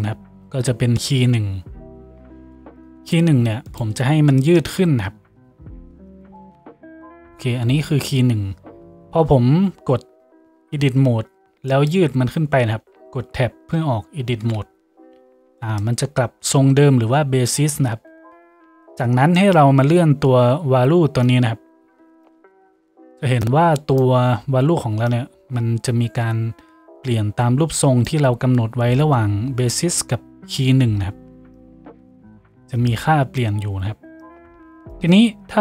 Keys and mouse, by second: 3.2 Tab, 5.0 g, 6.2-21.4 middle drag, 6.4 Tab, 9.4 Tab, 14.4 Tab, 21.4-35.6 drag.